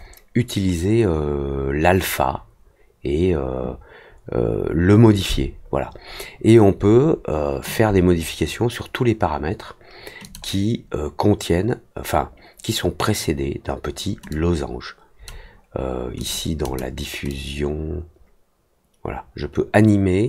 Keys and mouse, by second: 10.2 click, 14.2 click, 16.1 click, 16.6 click, 17.2-20.2 drag.